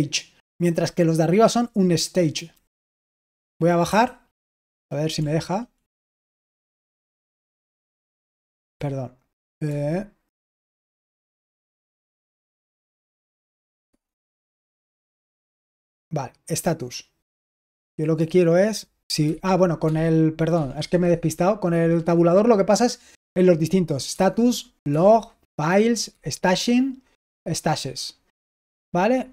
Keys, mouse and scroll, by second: 2.7 Down, 3.8 j, 5.1 Left, 5.8 j, 6.8 Down, 7.3-8.6 typing, 9.6 Tab, 11.9 Escape, 12.9 Tab, 13.8 Tab, 14.7 Tab, 15.2 Tab, 19.2 shift+Tab, 19.8 Tab, 20.4 Tab, 20.7 Tab, 20.9 Tab, 24.0 Tab, 24.8 Tab, 26.0 Tab, 27.1 Tab, 28.6 Tab.